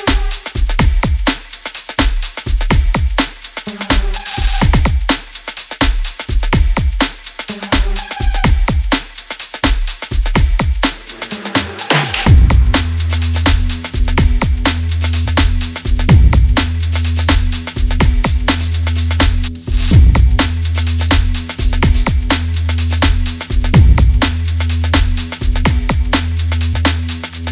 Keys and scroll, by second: 3.3 Tab, 3.9 7, 5.4-7.1 typing, 6.7 Return.